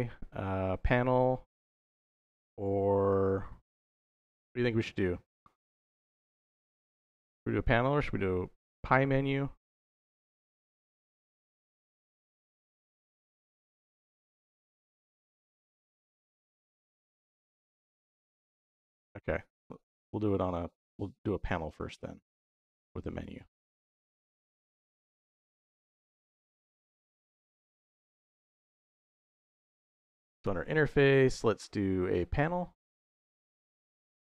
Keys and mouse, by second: 26.5 click, 27.2 shift+a.